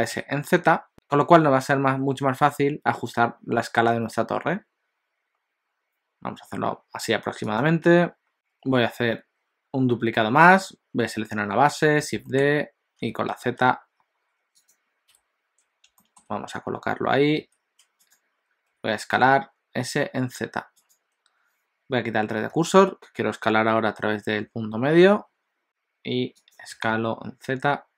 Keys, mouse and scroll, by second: 8.3 click, 10.8 click, 12.0 shift+d, 16.0 shift+middle click, 17.4 z, 18.7 s, 25.6 s, 26.8 g.